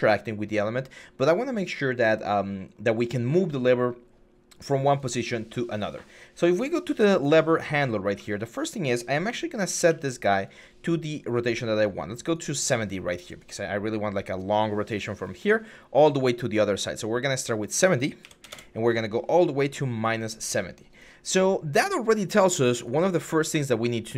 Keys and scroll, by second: 8.0 e, 9.1 e, 13.0 d, 18.0 typing, 18.3 Return.